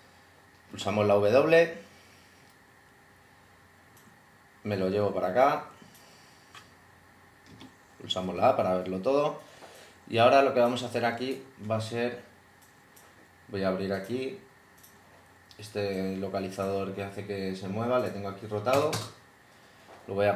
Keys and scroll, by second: 0.7 w, 1.0 w, 7.5 a, 18.7 0.